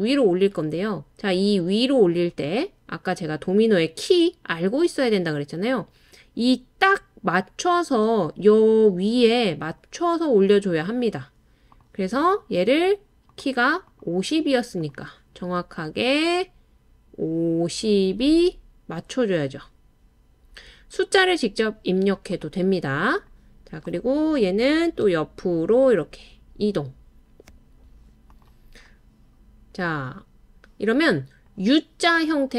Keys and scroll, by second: 25.4-26.7 typing.